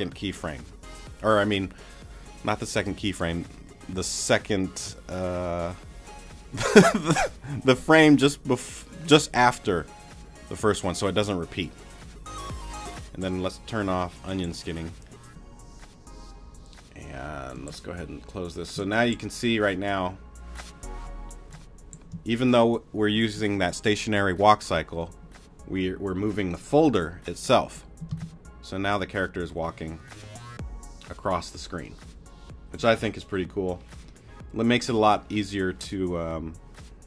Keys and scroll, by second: 18.7 space, 28.1 space.